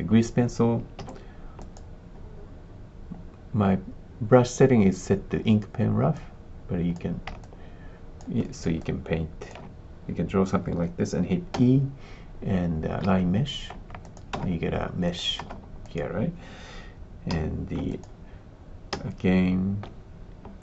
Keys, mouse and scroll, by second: 1.0 f, 6.1 click, 7.4 alt+click, 8.4 alt+middle click, 8.7 alt+click, 11.5 e, 14.1 click, 14.3 space, 15.0 click, 15.4 space, 15.8 click, 17.3 s, 17.9 click, 18.9 e, 20.5 click.